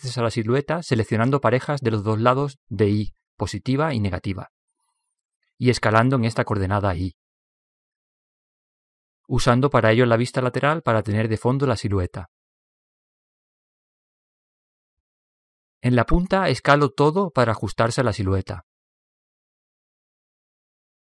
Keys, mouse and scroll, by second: 1.3 s, 7.1 a, 8.1 b, 10.6 s, 15.5 a, 16.0-18.4 middle drag, 18.2 b.